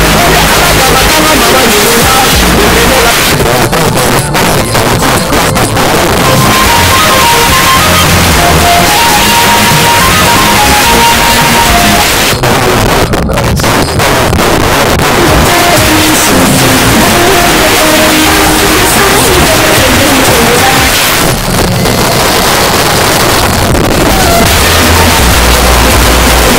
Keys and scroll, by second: 3.1 Page_Down, 12.0 Page_Down, 20.9 Page_Down.